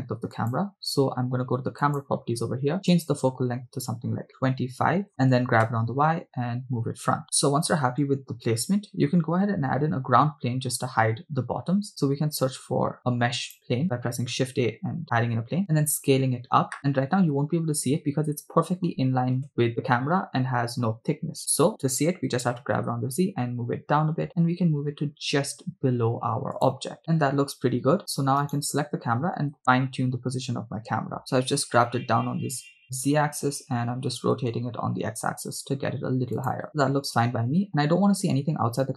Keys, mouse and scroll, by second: 0.4 click, 1.9 click, 3.0-4.4 drag, 5.6 g, 5.7 y, 8.1 click, 12.2 shift+a, 15.6 s, 16.8 click, 19.4 KP_0, 21.8 KP_0, 22.3 g, 22.8 z, 26.6-27.1 drag, 28.6 right click, 31.2 click, 31.9 r, 32.4 x, 36.4 shift+click.